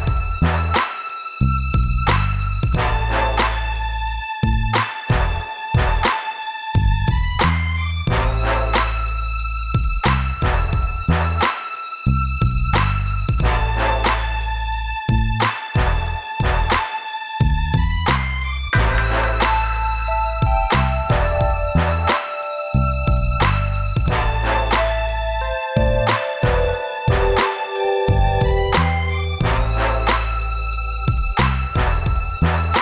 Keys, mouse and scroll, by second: 0.0 scroll up 1, 0.6 scroll down 1, 1.6 scroll up 1, 2.4 click, 2.5 click, 3.4 click, 4.2 click, 6.4 click, 6.5 click, 7.5 click, 7.6 click, 10.5 click, 11.2 middle click, 11.8 scroll down 1, 12.6 click, 21.2 scroll down 2, 22.4 click, 22.6 click, 23.1 scroll up 1, 25.1 right click, 25.9 click, 26.1 click, 26.6 click, 28.1 p, 30.2 scroll down 1.